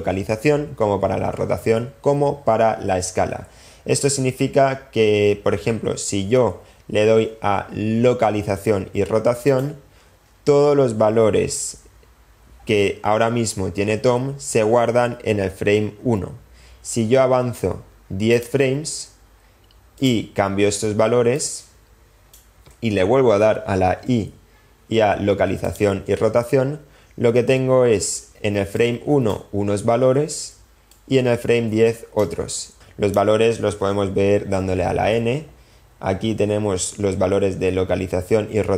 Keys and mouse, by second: 18.4 click, 19.9 click, 21.4 click, 28.8 click, 30.9-32.3 drag, 32.7-33.3 drag, 35.0 n.